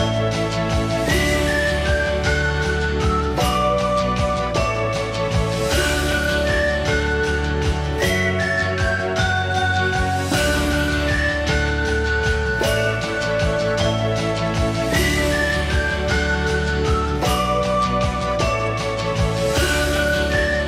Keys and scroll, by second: 6.6 Delete, 7.4 p, 11.7-12.6 typing, 17.8 i, 18.8 Escape.